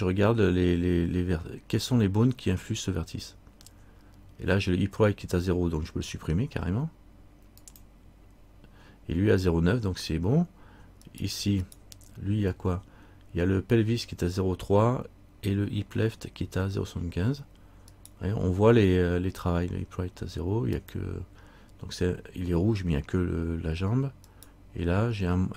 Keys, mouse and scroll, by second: 7.8 click, 11.2 right click, 18.1 right click, 20.9 click.